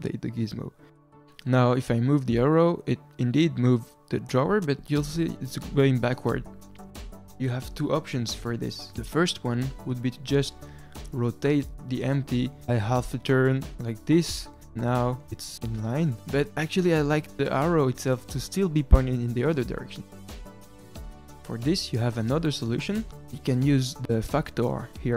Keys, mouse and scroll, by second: 11.1 r, 20.1 r.